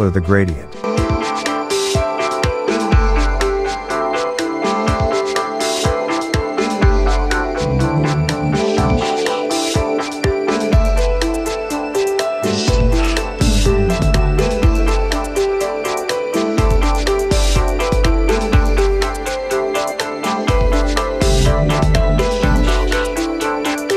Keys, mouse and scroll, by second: 1.4 click, 4.2-6.8 drag, 6.8 Tab, 10.2 click, 12.2 click, 17.6 Tab, 19.0 shift+Tab, 19.8 shift+Tab, 20.3-23.7 drag.